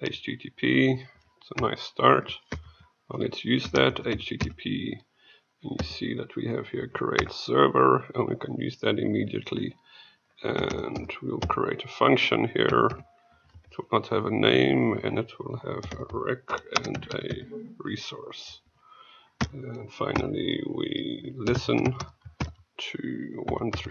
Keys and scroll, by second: 1.5 Return.